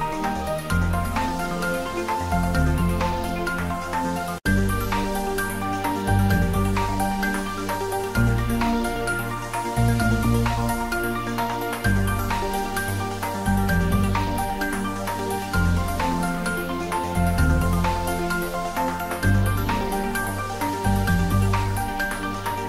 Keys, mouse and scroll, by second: 1.7 Tab, 2.6-4.2 drag, 4.2 Tab, 6.0 right click, 6.7 click, 7.6 middle click, 8.4-10.1 middle drag, 10.1-12.1 drag, 12.1 Tab, 14.3 click, 14.7 Tab, 15.8-17.0 drag, 17.0 Tab, 17.5 ctrl+middle click, 18.5 middle click, 19.2 Tab, 19.6 middle click, 20.2 click, 21.9 3, 22.2 click.